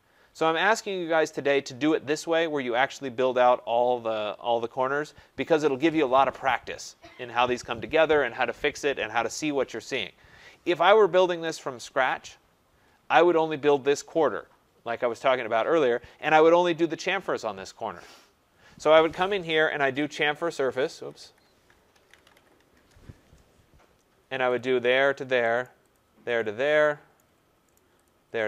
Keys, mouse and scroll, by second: 1.6 right click, 4.9 scroll, 10.3 scroll, 11.4 right click, 11.8 scroll, 12.8 scroll, 14.3-15.4 scroll, 15.5 scroll, 19.5-23.2 typing, 20.8 Escape, 27.1 Return.